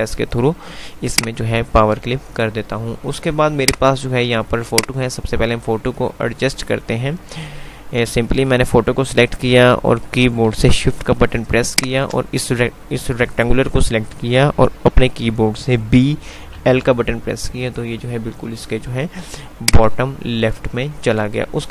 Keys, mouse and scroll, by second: 1.3 click, 3.7-6.3 drag, 16.0-16.7 typing, 19.8 click, 20.2 F2.